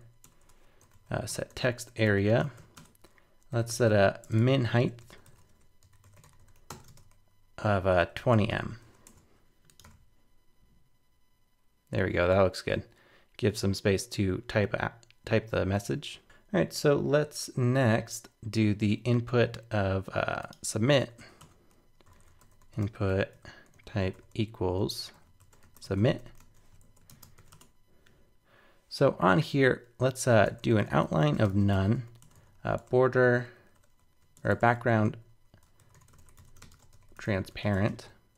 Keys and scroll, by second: 8.8 super+s, 9.0 super+Tab, 9.8 super+r, 16.2 super+Tab, 26.8 super+Right.